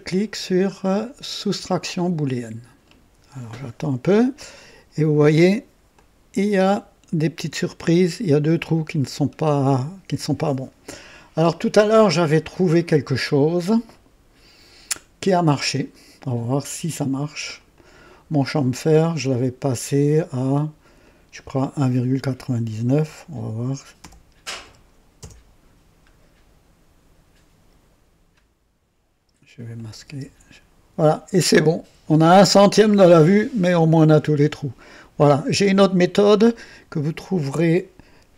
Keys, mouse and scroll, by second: 1.5 click, 4.4-5.6 drag, 5.9-6.8 drag, 8.1 scroll up 1, 8.8-9.3 scroll down 2, 15.7 click, 17.5 click, 21.0 click, 22.8 KP_1, 24.0 ,, 24.4 KP_9, 24.6 KP_9, 25.2 KP_Enter, 29.7 click, 30.1 space.